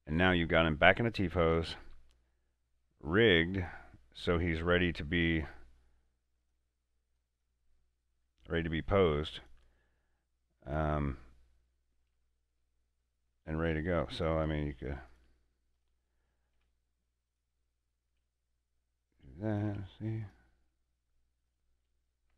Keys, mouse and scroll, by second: 0.1 Tab, 0.6 middle click, 1.6 scroll down 1, 2.0 scroll up 1, 2.2-3.7 middle drag, 3.7 right click, 4.6 r, 5.4 right click, 6.5 click, 8.2 r, 9.5 right click, 10.2-12.3 middle drag, 12.7-13.0 scroll up 1, 13.4 shift+middle click, 14.2 right click, 14.6 shift+s, 15.1 right click, 15.8 click, 16.6 r, 17.3 click, 18.1 r, 19.1 click, 19.6 right click, 19.7 r, 20.3 click, 20.7 middle click, 21.5 right click, 21.7-22.3 typing, 22.0 click.